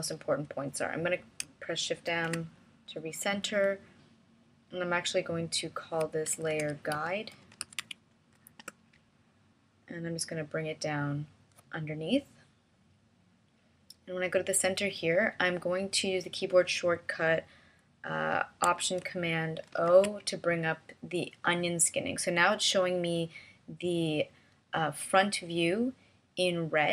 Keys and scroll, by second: 3.5 shift+m, 7.4-9.2 typing, 9.5 Return, 20.6 alt+super+o.